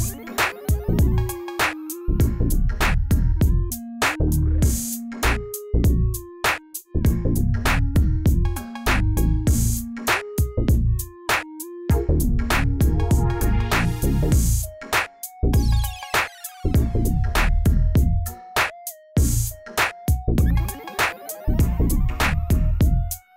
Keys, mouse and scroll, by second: 1.5 click, 2.4 shift+a, 4.7 g, 5.9 s, 7.9 click, 8.3 click, 8.8 KP_0, 9.8-10.2 drag, 11.3 click, 12.7 click, 13.5 click, 13.7 click, 14.2 click, 15.0-16.2 drag, 16.4 click, 17.0-17.5 drag, 17.5-17.9 scroll up 2, 18.2 click, 18.4-18.7 shift+middle drag, 18.7-19.5 scroll up 9, 19.8 shift+click, 20.6-21.8 drag, 22.3 Tab, 22.7-23.3 shift+middle drag.